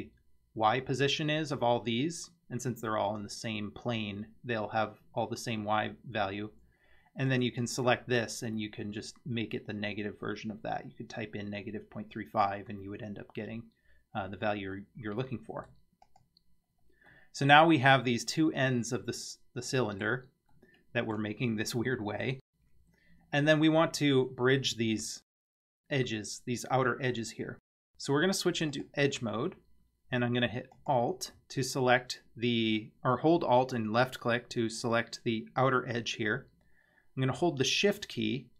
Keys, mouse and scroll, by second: 7.3 click, 14.8-15.7 middle drag, 16.1 click, 16.7-17.1 scroll up 2, 17.1-20.1 middle drag, 20.5-21.2 middle drag, 28.7 click, 30.7 alt+click.